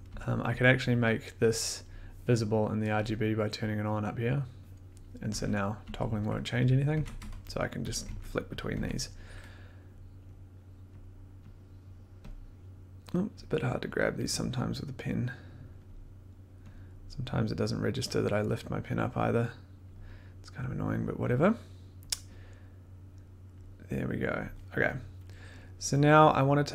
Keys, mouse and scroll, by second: 0.0-0.5 typing, 3.0 click, 3.6 click, 4.4 click, 5.0-5.8 typing, 6.7 click, 6.9 1, 8.0 click, 8.0 1, 8.7 click, 8.7 1, 10.5 click, 11.0 click, 11.4 click, 11.8 click, 12.2 click, 12.7 click, 13.9 click, 15.6 click, 16.7 click, 18.0 click, 19.8 click, 20.8 click, 21.5 click, 23.5 click, 24.3 click.